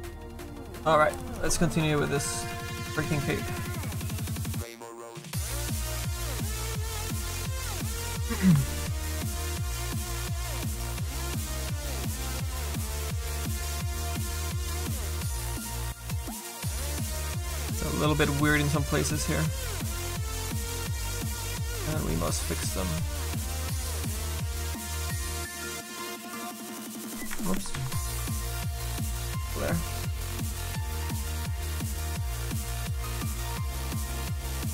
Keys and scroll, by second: 10.0 s, 11.0 s.